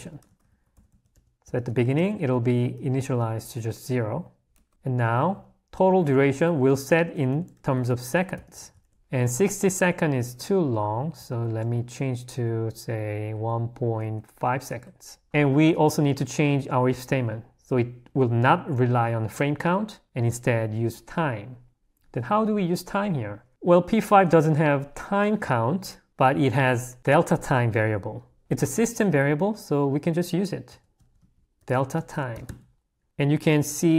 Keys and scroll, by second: 4.7 l, 6.4 a, 9.0 h, 11.2 i, 17.0 l, 28.4 o.